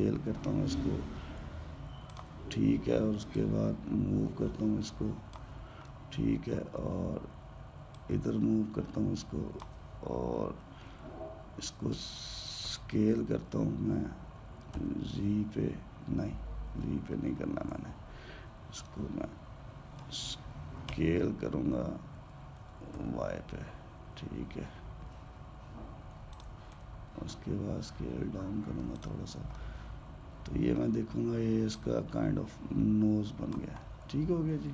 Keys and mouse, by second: 0.0 s, 4.1 click, 6.6-8.7 middle drag, 8.7 click, 13.4 s, 19.6-21.6 middle drag, 21.6 s, 27.5 s, 30.3-32.5 middle drag, 32.5 click, 34.5-34.7 middle drag.